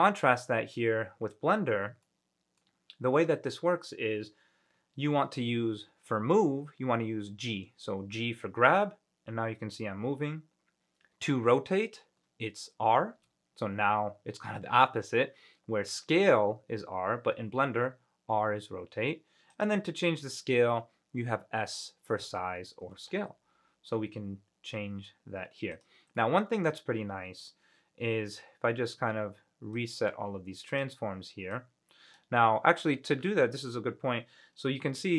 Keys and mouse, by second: 2.2 middle click, 7.8 g, 13.3 r, 19.7 click, 23.0 s, 25.9 click, 26.3-27.6 middle drag, 30.0-31.7 drag, 33.0 middle click, 33.0 click, 33.0 right click.